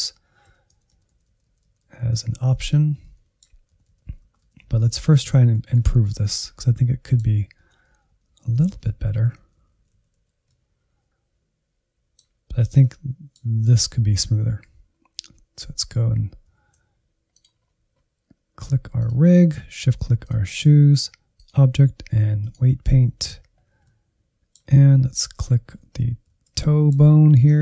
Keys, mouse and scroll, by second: 0.0 Right, 0.5 Right, 0.8 Left, 1.0 Left, 1.1 Left, 1.3 Left, 1.5 Left, 1.7 Left, 1.9 Left, 2.0-2.6 Left, 2.8 Left, 2.9 middle click, 3.7 Left, 3.9 Left, 4.3 Right, 4.5 Right, 4.6 Right, 4.8 Right, 5.1 Right, 5.2 Right, 5.6 Left, 5.8 Left, 6.0 Left, 6.2 Left, 6.3-7.4 middle drag, 7.4 Left, 7.6 Left, 7.9 Right, 8.1 Right, 8.3 Right, 8.5 Right, 8.7 Right, 9.0 Right, 9.2 Right, 9.4-10.2 Right, 10.4 middle click, 11.2 click, 11.9 scroll down 2, 12.1 shift+middle click, 12.3 scroll up 6, 12.6 shift+middle click, 13.2-14.1 Right, 14.6 click, 15.1 Left, 15.2-16.3 middle drag, 16.3 Insert, 16.5-17.2 scroll down 4, 17.2 click, 17.5-18.9 scroll down 4, 18.9-23.2 drag, 23.2-23.9 scroll up 5, 23.9-26.2 middle drag, 26.2 alt+z, 26.6-27.6 middle drag.